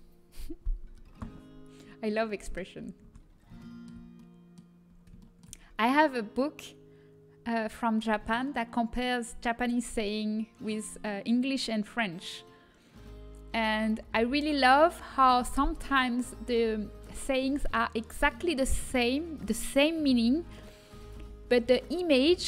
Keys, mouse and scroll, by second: 1.5-4.6 middle drag, 3.0 Tab, 4.9 middle click.